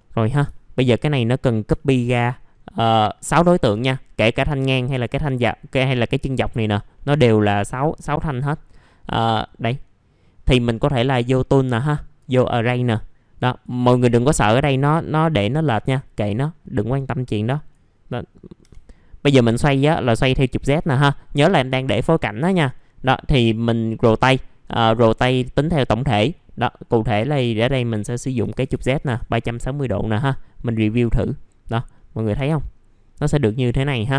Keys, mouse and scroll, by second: 0.2 scroll down 1, 0.5 alt+middle click, 1.7 alt+middle click, 2.5 scroll up 1, 3.6 s, 6.5 alt+middle click, 8.1 alt+middle click, 11.1 click, 18.6 6, 19.6 click, 28.4 KP_3, 30.6 click, 31.9 middle click, 32.3 F4, 32.7-34.1 scroll up 1.